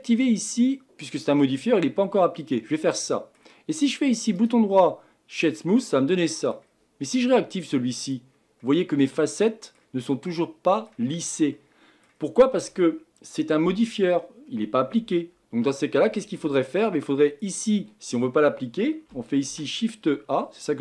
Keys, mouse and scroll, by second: 2.4 click, 3.0-5.4 middle drag, 5.4-5.8 right drag, 5.8-8.0 middle drag, 8.0 click, 8.6-11.0 middle drag, 11.0-12.1 scroll up 1, 12.1-14.5 scroll up 1, 14.5-16.0 scroll up 1.